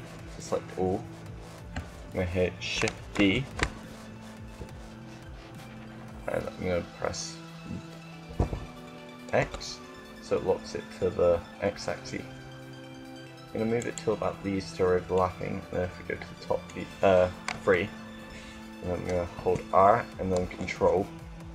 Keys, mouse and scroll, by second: 2.9 shift+d, 13.9-15.5 drag, 17.2 KP_3, 19.1 KP_3, 19.2 r.